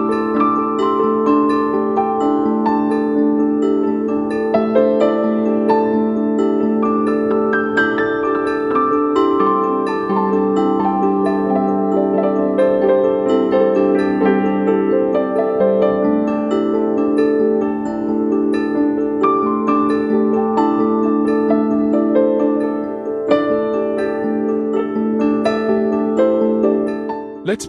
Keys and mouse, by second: 1.6 middle click, 3.1 shift+middle click, 3.8 middle click, 5.0 click, 7.0 click, 7.8 shift+middle click, 8.0 l, 13.4 Left, 15.8 l, 16.5 shift+middle click, 17.3-19.8 drag, 19.8-21.0 middle drag, 20.5 Left, 20.6 Left, 22.7 middle click, 23.3-23.8 middle drag, 24.3 shift+middle click, 24.5 middle click, 25.8 middle drag.